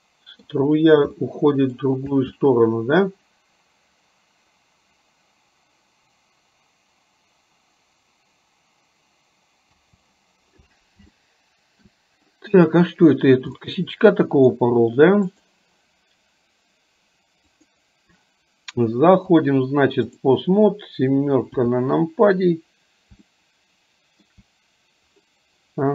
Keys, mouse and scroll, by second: 1.5 middle click, 2.4 space, 9.9 space, 11.3-12.0 shift+middle drag, 13.8-14.9 middle drag, 15.5 click, 17.5 click, 19.4-20.4 drag, 21.8 KP_7, 23.4-24.4 shift+middle drag.